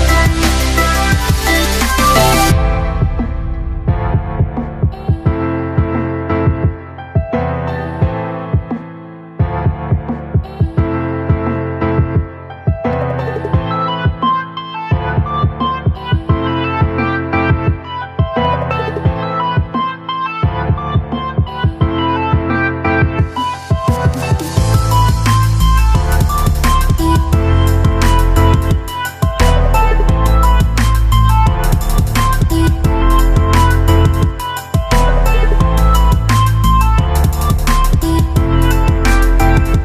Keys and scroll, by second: 0.5 ctrl+alt+z, 2.4 b, 4.3 x, 7.3 x, 12.3 space, 18.7 space, 19.3 z.